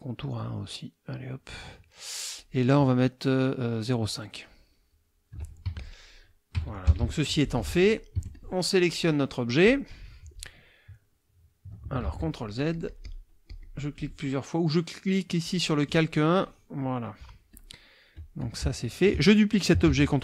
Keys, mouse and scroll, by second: 0.2-1.5 right drag, 2.4 click, 3.8-5.1 right drag, 5.6 F1, 5.8 click, 6.8 KP_Subtract, 7.6 F2, 8.3 F1, 8.3-9.1 drag, 9.6-10.6 drag, 12.0 ctrl+z, 12.6-13.3 ctrl+drag, 13.5 ctrl+click, 15.4 click, 16.4-17.0 drag, 17.5-18.3 drag, 18.6 space, 19.8 ctrl+d.